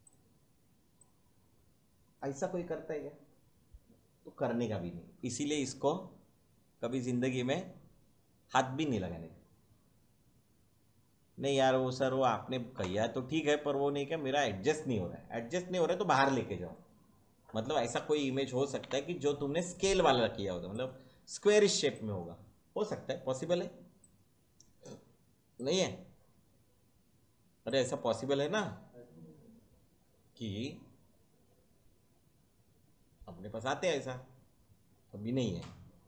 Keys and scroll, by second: 18.8 Delete.